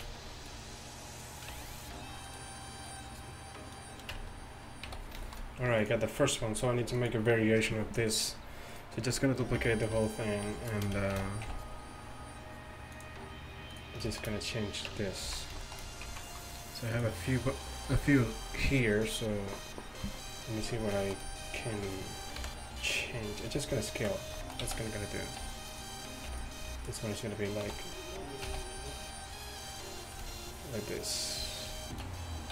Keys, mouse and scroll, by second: 4.2 Tab, 4.2 s, 4.9 a, 9.6 b, 11.2 shift+d, 14.1-14.9 drag, 14.9 Tab, 15.3 z, 15.4 click, 16.1 z, 22.4 KP_1, 24.7 z, 25.6 click, 26.3 b, 27.7 s.